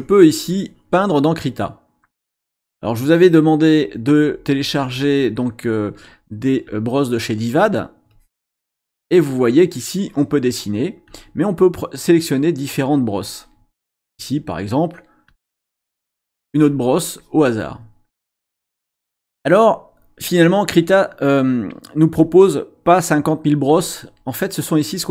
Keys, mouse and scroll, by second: 6.6 click, 8.1 click, 11.0-11.4 scroll up 1, 12.6 click, 15.3 click, 16.0 click.